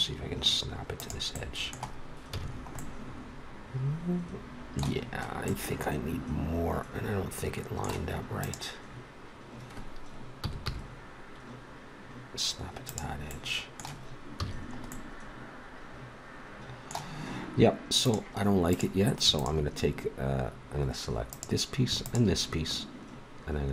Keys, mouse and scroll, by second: 2.3 a, 5.8-7.8 middle drag, 8.4-10.1 drag, 10.4 g, 14.4 a, 18.0-19.4 middle drag, 19.8-21.2 middle drag, 21.3 middle click, 22.1-23.7 drag.